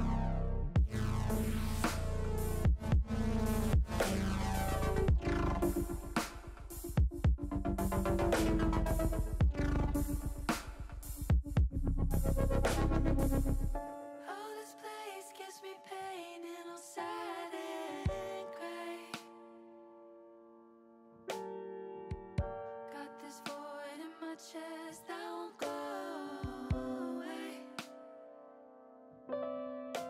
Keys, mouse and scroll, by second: 1.3-2.5 drag, 3.9 middle click, 4.7 middle click, 6.0 click, 8.2 KP_1, 9.2 KP_3, 10.7-12.3 drag, 12.8 ctrl+z, 13.4 shift+click, 14.9 middle click, 16.2 ctrl+z, 17.0-18.5 shift+drag, 19.0 middle click, 21.0 KP_3, 23.1 click, 24.1 shift+click, 26.6 click, 27.4 click, 27.8-29.0 drag, 29.7 shift+click.